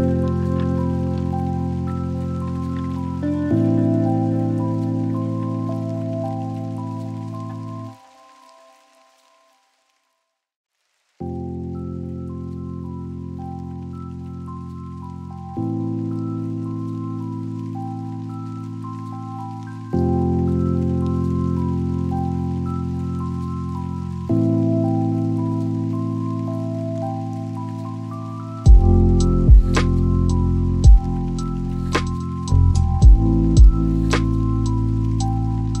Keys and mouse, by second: 7.2-11.7 drag, 10.9 KP_0, 13.2 click, 17.8 click, 27.2 click, 29.0 click, 31.7 click, 34.5-35.8 drag.